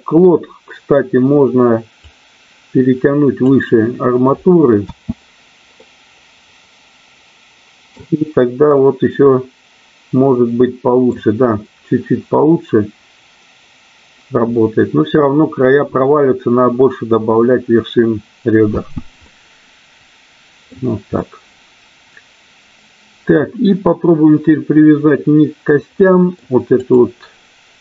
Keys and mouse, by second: 2.1 click, 4.7 space, 6.4-8.4 middle drag, 9.3-11.9 middle drag, 19.3-20.7 middle drag, 19.3 space, 21.1-23.2 middle drag, 25.9 middle click, 26.7 click.